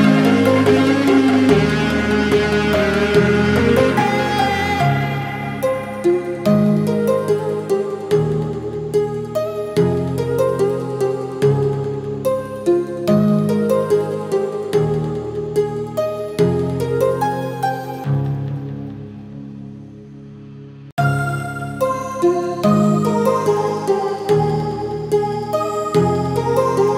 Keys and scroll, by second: 12.6 ctrl+z, 16.8 Delete, 23.4 Delete, 24.2 Delete.